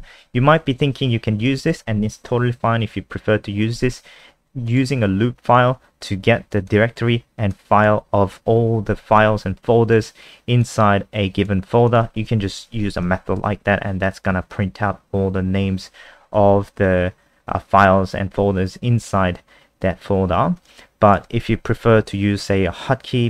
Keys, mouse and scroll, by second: 4.7 click, 12.6 ctrl+s, 13.3 F5, 20.6 click, 21.9 ctrl+Page_Up.